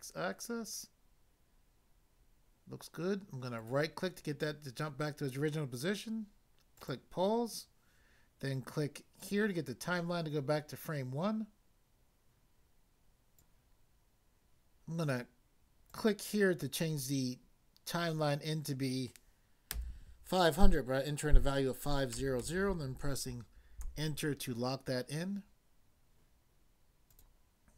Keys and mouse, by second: 0.2 typing, 3.6 right click, 6.7 click, 9.2 click, 13.4 click, 15.9 click, 19.7 5, 22.1 0, 23.8 Return, 27.1 click.